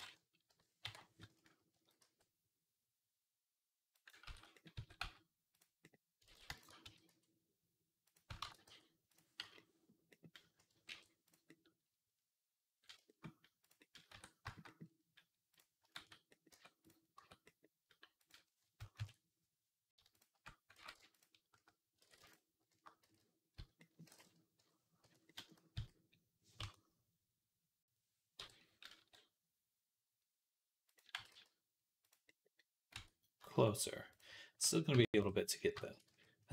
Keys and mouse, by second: 0.3-6.0 drag, 1.6 s, 4.1 ctrl+z, 4.6 s, 6.1 ctrl+z, 6.7 s, 8.3 ctrl+a, 8.9 click, 9.2 /, 10.7 alt+h, 14.0 Tab, 14.5-16.3 middle drag, 15.8 shift+s, 16.3 Tab, 17.3 Tab, 17.6 middle click, 18.8 ctrl+KP_Add, 20.6 ctrl+z, 21.9 ctrl+z, 22.8 z, 23.4 z, 24.4 click, 25.6 s, 28.2 o, 28.8 s, 31.0 g, 32.8 Tab, 34.7 KP_3, 35.1 Tab, 35.9 z.